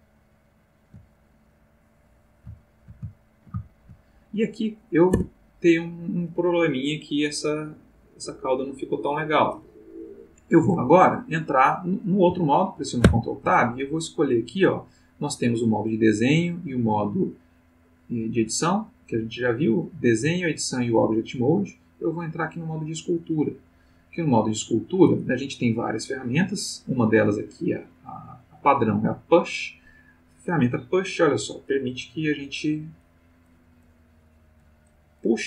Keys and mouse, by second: 2.6-4.1 shift+middle drag, 5.1 Tab, 13.0 ctrl+Tab, 22.8 click, 30.7 click, 31.7 click, 32.4 click, 33.0 click.